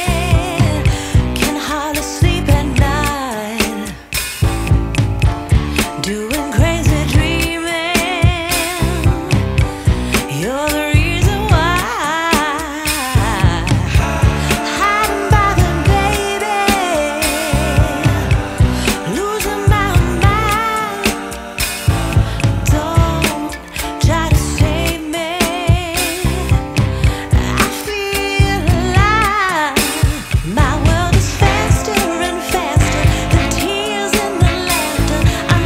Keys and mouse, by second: 7.4 space, 7.6 click, 7.9 space, 8.5 click, 9.3 space, 9.3 click, 9.4 space, 9.5 ], 9.6 click, 9.9 s, 10.0 alt+click, 11.1 z, 11.1 click, 11.6 s, 12.3 alt+click, 12.9 click, 13.6 click, 14.3-17.7 typing, 14.9 click, 15.6 click, 16.2 alt+click, 16.5 click, 16.8 click, 17.4 click, 17.8 alt+click, 19.5-19.9 typing, 19.6 click, 19.9 alt+click, 20.5 alt+click, 20.9 alt+click, 21.3 alt+click, 21.5-31.3 typing, 22.7 click, 24.0 click, 26.2 click, 26.6 click, 27.1 click, 27.5 click, 27.7 click, 27.9 click, 28.5 click, 28.5 click, 29.1 click, 29.3 click, 30.6 click, 30.8 click, 32.3-33.8 typing, 32.4 click, 33.3 click, 33.6 click, 33.7 click, 33.9 click, 35.1 [.